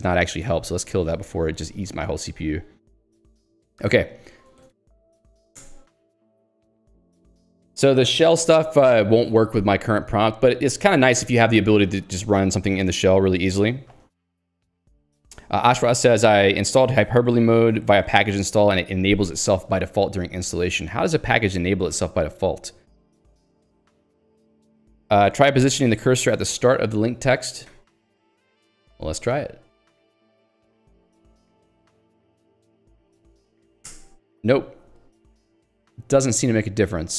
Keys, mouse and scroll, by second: 0.2 Return, 0.6 Escape, 1.2 Escape, 6.1 Escape, 7.3 ctrl+d, 10.1 l, 10.4 k, 25.8 Escape, 27.7 click, 28.2 ctrl+g, 28.8 ctrl+u, 32.3 Escape, 32.8 l, 33.4 alt+x, 33.8 ctrl+g, 34.4 alt+Return.